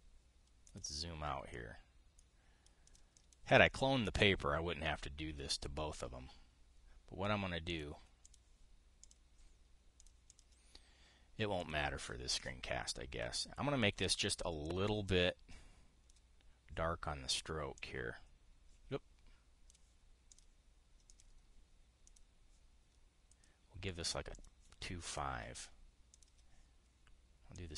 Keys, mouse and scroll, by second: 1.4 click, 3.6 click, 3.8 click, 6.2 click, 8.4 click, 8.9 click, 9.7 click, 10.7 click, 11.0 click, 12.3 click, 15.4-16.9 drag, 18.5-20.5 drag, 21.0 click, 21.8 click, 22.7 click, 24.0 click, 25.0 click, 25.8 click, 26.8 click.